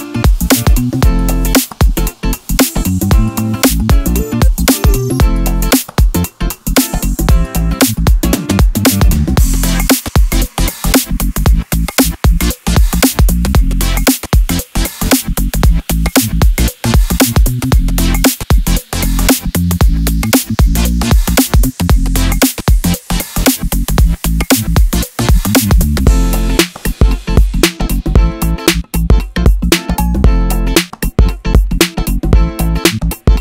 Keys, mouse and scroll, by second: 0.1 click, 0.6 ctrl+b, 2.5 scroll down 2, 2.7 click, 2.8-9.7 middle drag, 3.5 scroll down 2, 3.7-4.3 scroll up 2, 4.3-4.7 scroll down 2, 8.5 shift+a, 8.8 Escape, 9.2 scroll down 2, 9.7 click, 9.8 shift+s, 10.3-12.2 middle drag, 10.5 scroll up 2, 10.8 shift+a, 12.2 Tab, 13.2 click, 13.4 g, 14.0 click, 14.2 s, 14.6 click, 14.6 g, 15.5 click, 16.1 g, 16.7-18.1 drag, 18.3 g, 19.0 3, 19.1 click, 19.5 g, 20.2 click, 22.9 2, 23.0 click, 23.2-24.6 middle drag, 23.7 g, 24.6 click, 24.7 middle click, 24.9 3, 25.1 click, 25.4 g, 25.9 click, 27.6-30.7 middle drag, 28.0 ctrl+r, 30.7 alt+click, 31.0-33.4 middle drag, 31.3 alt+e.